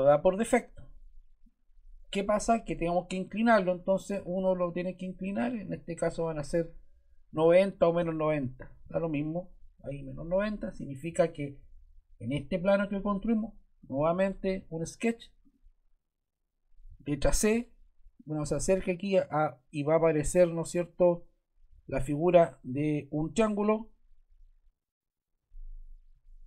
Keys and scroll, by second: 7.9-9.2 typing, 17.2 c.